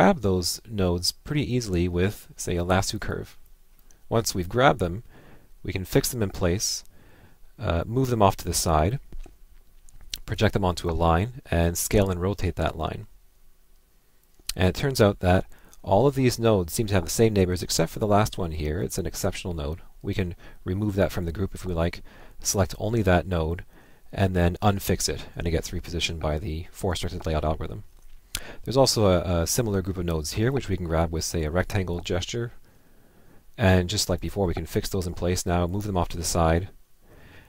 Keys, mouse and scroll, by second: 3.5 click, 9.0 Left, 18.8 ctrl+Left, 21.2 Left, 30.6 Left, 32.0 Left, 35.0 ctrl+click.